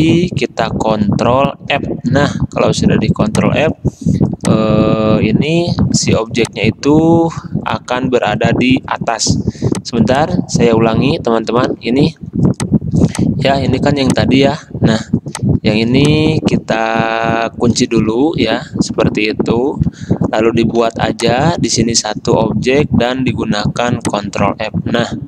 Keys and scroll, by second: 1.9 ctrl+f, 6.0 ctrl+f, 12.0 ctrl+alt+2, 13.7 ctrl+z, 15.6 ctrl+z, 18.2 ctrl+2, 21.0 m, 22.8 v, 24.6 ctrl+f.